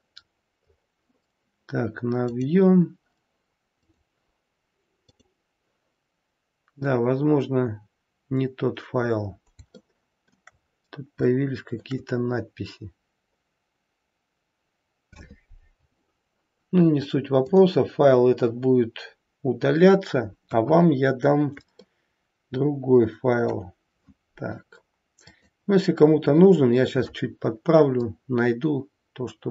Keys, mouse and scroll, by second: 17.7 click, 17.7-18.0 scroll down 4, 18.8-20.1 scroll down 3, 20.3 KP_1, 21.0-21.7 scroll down 1, 21.8 shift+middle click, 25.2 click, 27.8 click.